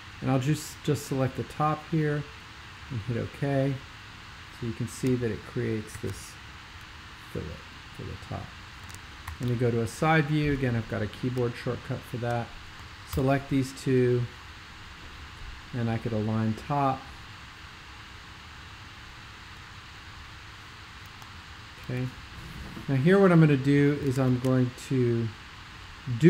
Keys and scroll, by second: 6.0 shift+super+g, 9.3 alt+shift+super+k, 10.4 x, 13.2 super+=, 24.3 alt+shift+super+l.